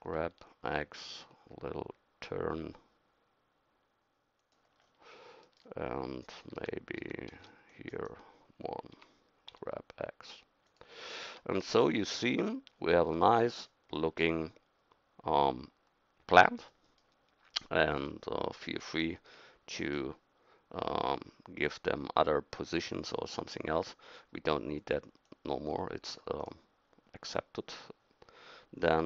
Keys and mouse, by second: 6.5 a, 6.6 a, 7.0 a, 7.4 c, 9.0 g, 11.3 Tab, 23.3 right click, 26.4-29.0 middle drag.